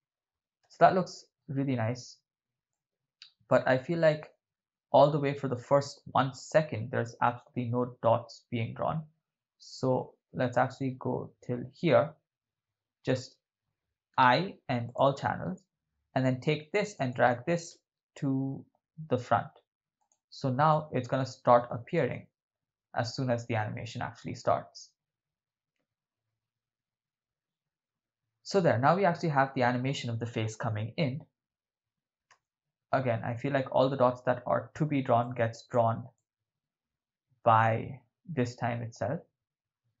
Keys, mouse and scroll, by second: 0.7 shift+space, 2.8-13.2 drag, 14.1 i, 17.0 right click, 17.7 g, 20.0-20.4 drag, 20.8 click, 22.0 shift+space, 32.4 shift+space, 35.3 click, 36.3-40.0 drag.